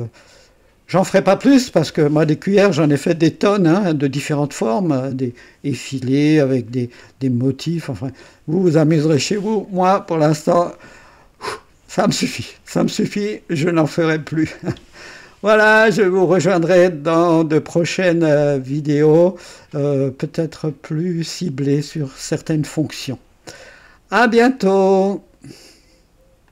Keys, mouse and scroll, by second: 4.5 click, 9.5 right click, 17.0 right click, 25.0 right click, 26.4 click.